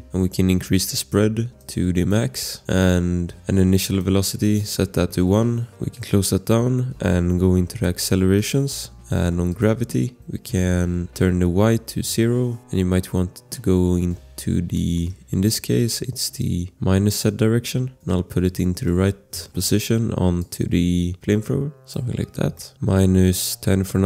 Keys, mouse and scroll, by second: 0.1 scroll, 1.6 click, 2.6 click, 3.9 click, 5.0 1, 5.1 Return, 8.3 click, 9.5 click, 11.9 0, 12.0 Return, 14.7 click, 15.0 scroll, 15.8 click, 15.8 scroll, 18.5 click, 18.8 click, 19.4 click, 19.6 shift+click, 20.4 click, 22.2 scroll, 22.5 shift+click, 22.8 click, 22.9-24.0 typing.